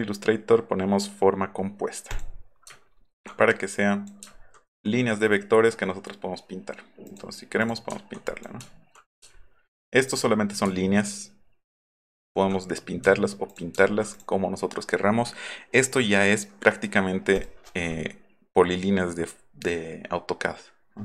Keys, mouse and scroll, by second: 2.1 click, 2.8 alt+middle click, 3.0 alt+middle click, 3.7-4.1 drag, 4.3 alt+middle drag, 7.1 click, 7.6 click, 8.3 click, 8.7 alt+middle click, 9.4 alt+middle click, 10.1 click, 10.9 alt+middle click, 11.1 alt+middle click, 11.7 alt+middle click, 12.0 alt+middle click, 12.3 alt+middle click, 13.5 click, 13.8 alt+middle drag, 14.1 click, 17.4 click.